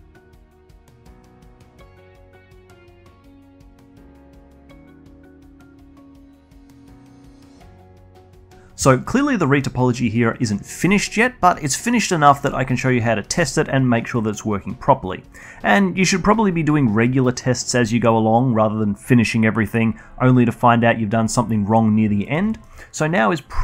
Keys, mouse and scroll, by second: 0.0 alt+click, 0.6 alt+click, 0.6-4.7 typing, 0.7 alt+click, 0.8 alt+middle click, 0.9 scroll up 2, 0.9 click, 1.1 ctrl+z, 1.3 alt+click, 1.4 alt+middle click, 1.5 alt+click, 1.8 alt+click, 2.0 scroll up 1, 2.1 alt+middle click, 2.1 alt+click, 2.2 shift+click, 2.4 alt+shift+click, 2.8 click, 3.4 alt+click, 3.9 alt+shift+click, 4.2 scroll up 1, 4.4 alt+click, 4.4 Delete, 4.5 alt+drag, 5.0 ctrl+r, 5.1 alt+drag, 5.3 scroll up 1, 5.4 alt+click, 5.4-5.8 scroll down 3, 5.6 alt+click, 5.8 alt+click, 6.1 alt+click, 6.2 Tab, 6.3 alt+middle click, 6.3 alt+click, 6.4-6.8 scroll down 2, 6.5 alt+click, 6.8 alt+click, 22.2 middle click, 22.4 alt+middle drag, 22.7-23.6 alt+drag.